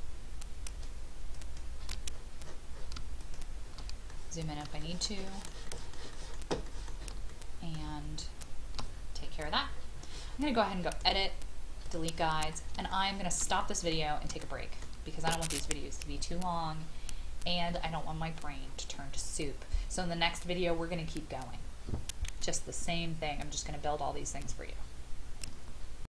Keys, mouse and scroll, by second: 0.6 shift+click, 1.3 shift+click, 2.1 scroll up 1, 3.2 shift+click, 4.1 middle click, 4.8 shift+middle click, 5.2 shift+middle click, 5.6 shift+middle click, 6.1 shift+middle click, 6.6 shift+middle click, 7.3 shift+middle click, 8.2 shift+click, 8.9-10.9 scroll down 1, 10.9 click, 12.2-12.7 scroll down 1, 12.9 shift+middle click, 14.0 scroll down 1, 14.4 shift+middle click.